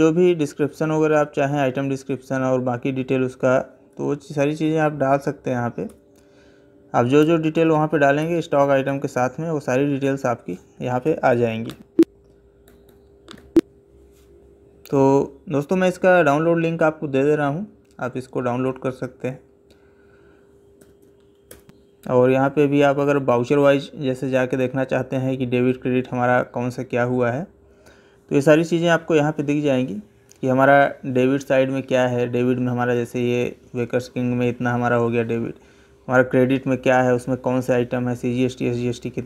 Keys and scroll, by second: 10.8 Escape, 20.6 Up.